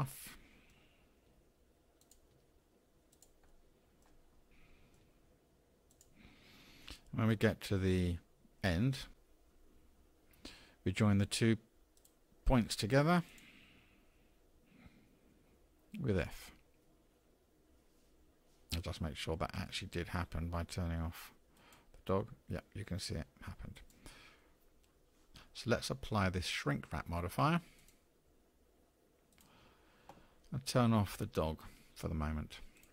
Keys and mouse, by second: 0.0 middle click, 0.5-2.9 typing, 0.8 click, 1.0 middle click, 1.4 click, 1.7 click, 2.0 click, 2.3 click, 2.5 click, 2.7 click, 4.0-6.0 typing, 4.5-4.9 drag, 11.9 click, 13.3 shift+click, 16.7 f, 21.6 click, 23.8 click, 27.8-29.6 drag, 32.8 click.